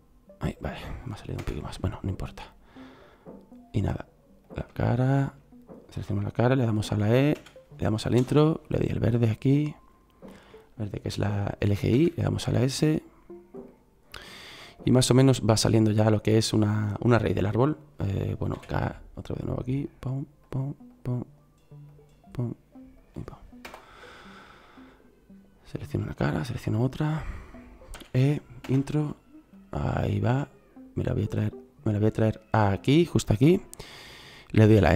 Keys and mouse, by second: 7.3 e, 11.9 s, 18.5 k, 26.6 middle click, 27.9 e, 34.7 s.